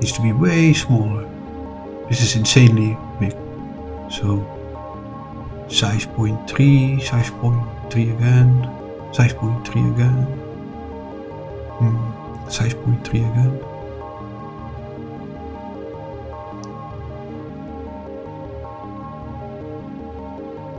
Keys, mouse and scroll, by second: 0.6 click, 1.3-3.2 scroll down 12, 3.8-5.1 scroll up 8, 7.4 s, 9.5 ., 9.6 3, 10.2 Return, 11.6 s, 12.3 ., 12.4 3, 12.9 Return, 13.8 s, 14.0 ., 14.1 3, 14.7 Return, 17.2 scroll down 2, 19.5 scroll up 2.